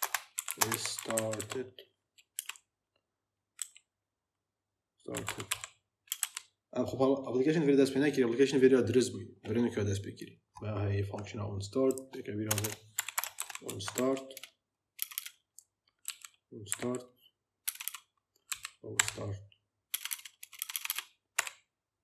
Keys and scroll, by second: 0.0-2.3 typing, 3.5 r, 5.0 t, 5.4 s, 6.0 BackSpace, 6.0 d, 12.3 Return, 12.6-14.9 typing, 15.9 a, 17.5 BackSpace, 18.4 a, 19.8 BackSpace, 21.3 o.